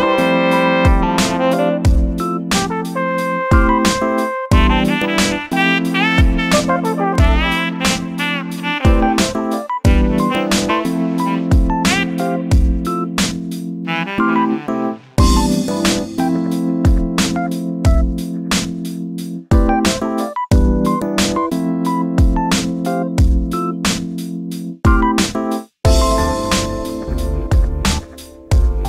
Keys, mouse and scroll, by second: 15.4 click, 15.9-16.4 middle drag, 16.4 scroll up 1, 16.6 scroll down 3, 17.5 click, 18.5 click, 19.4 z, 19.9-20.4 middle drag, 20.4 scroll up 3, 20.7-22.4 shift+middle drag, 22.4 z, 22.7 scroll down 3, 22.9-24.3 middle drag, 24.3 shift+a.